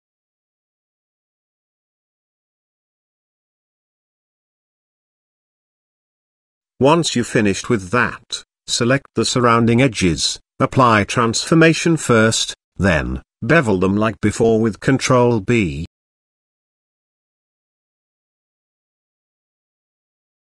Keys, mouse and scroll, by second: 0.3 click, 0.6 ctrl+z, 0.6 middle click, 0.9 shift+middle click, 1.2 middle click, 1.8 shift+click, 2.1 shift+middle click, 2.4 shift+middle click, 2.6 shift+click, 3.7 middle click, 4.3 shift+middle click, 4.8 middle click, 5.5 shift+middle click, 7.4 shift+click, 7.8 middle click, 8.4-9.5 shift+middle drag, 9.7 middle click, 10.3 shift+middle click, 11.2 Tab, 11.8 ctrl+a, 12.9 Tab, 15.2 ctrl+b.